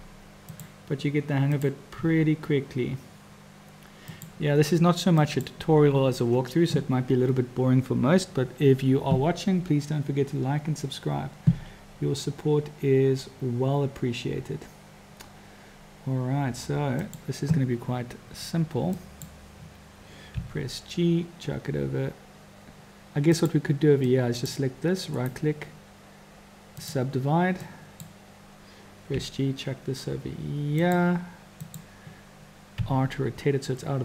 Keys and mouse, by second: 0.5-1.9 drag, 1.9 r, 5.2 click, 11.5 e, 19.0 click, 20.4 g, 24.1 click, 25.1-27.0 drag, 27.7-28.0 drag, 29.1 g, 31.6 click, 32.8 r.